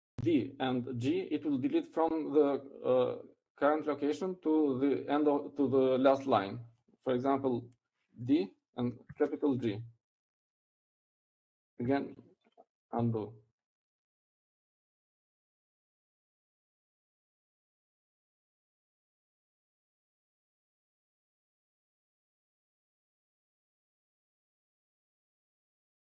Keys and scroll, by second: 11.3 d, 12.1 shift+g, 14.6 u.